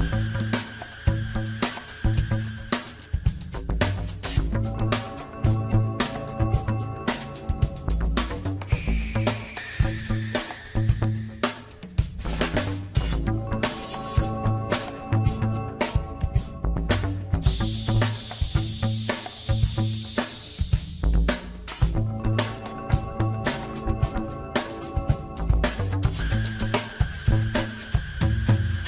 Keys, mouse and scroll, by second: 3.0 click, 3.3 Tab, 4.0 click, 4.6 Tab, 5.2-5.6 scroll up 3, 6.0-7.1 shift+middle drag, 7.1 KP_1, 8.1 scroll up 1, 8.8-10.4 shift+middle drag, 10.4-12.2 scroll down 2, 12.2 click, 13.4 click, 14.5 alt+shift+click, 15.8 alt+shift+click, 16.5-16.9 scroll up 4, 18.4 ctrl+b, 22.3 Tab, 22.8 scroll down 1, 22.9-23.8 middle drag, 23.8 ctrl+r, 24.3 click, 24.7 click, 24.9 Tab, 25.6 ctrl+r, 27.3 scroll down 1, 27.5-28.8 middle drag.